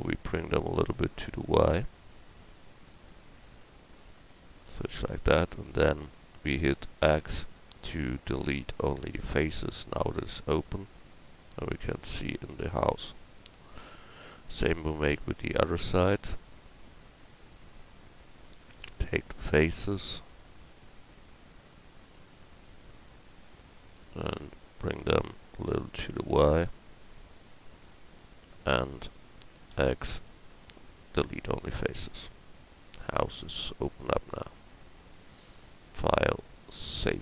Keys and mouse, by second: 1.4-4.6 drag, 5.1-7.0 middle drag, 7.0 x, 10.3 Tab, 16.9 middle click, 17.9 Tab, 25.9-29.1 middle drag, 29.7 x, 32.4 Tab.